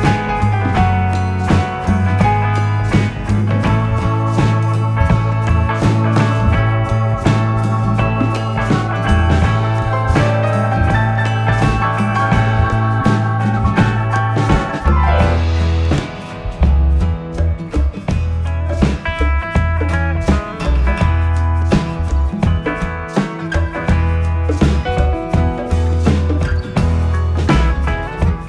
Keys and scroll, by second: 1.0 ], 2.5 4, 10.8 3, 10.9 Return, 16.7 3, 20.1 ], 20.9 4, 23.1 ctrl+z.